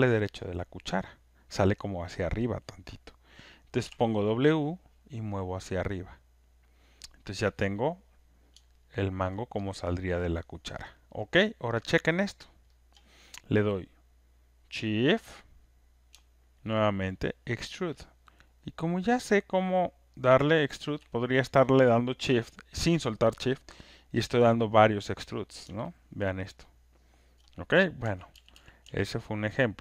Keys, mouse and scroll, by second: 6.7 click, 9.2 alt+right click, 9.5 alt+middle click, 10.7 alt+click, 11.1 alt+right click, 11.4 alt+middle click, 11.8 alt+click, 12.1 alt+right click, 12.5 alt+middle click, 13.0 alt+click, 17.9 shift+click, 19.7 shift+click, 20.8 shift+click, 25.3 middle click, 27.3 alt+click, 27.3 scroll, 28.0 z, 28.5 z, 28.8 z, 29.6 middle click.